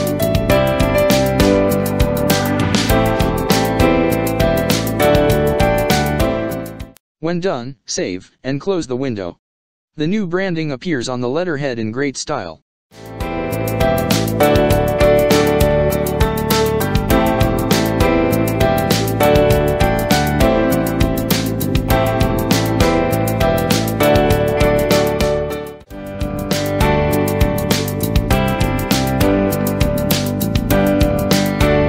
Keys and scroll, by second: 4.0 Right, 6.6 ctrl+s, 11.6 ctrl+-, 13.3 space, 14.2 ctrl+space, 14.8 space, 22.8 ctrl+space, 23.4 ctrl+space, 25.1 ctrl+space, 25.6 ctrl+space.